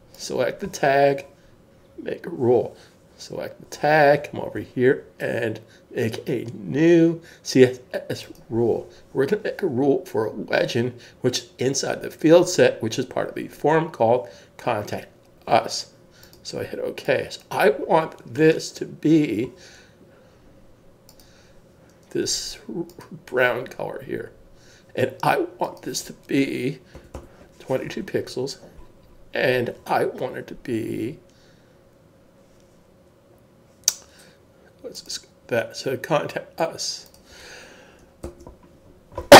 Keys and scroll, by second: 26.9 typing, 28.7 typing, 38.2 super+s.